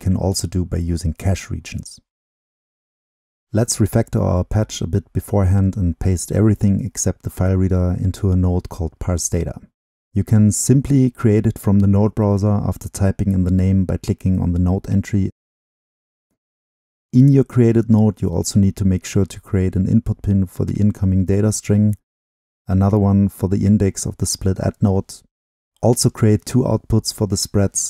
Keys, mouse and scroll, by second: 0.0 middle click, 0.2 click, 0.2-0.7 scroll down 2, 0.7 middle drag, 0.7-1.2 drag, 1.2 middle click, 1.2-3.0 scroll down 2, 3.0-8.4 drag, 8.4 ctrl+x, 9.0-11.2 drag, 12.5-14.9 drag, 14.9-15.4 scroll up 2, 15.4-18.0 drag, 18.0 ctrl+v, 19.8-20.5 drag, 20.5 ctrl+l, 20.7-23.8 ctrl+drag, 24.4-27.8 drag, 27.8 ctrl+middle click.